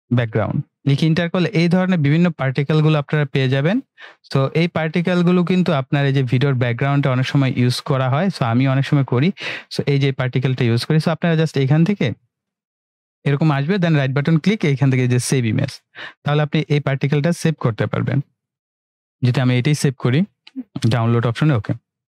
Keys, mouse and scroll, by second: 0.0-0.2 typing, 0.8 Return, 2.7 click, 8.0 scroll down 1, 8.9-9.6 scroll down 1, 11.4 click, 14.0 right click, 18.9 click, 21.7-22.0 drag.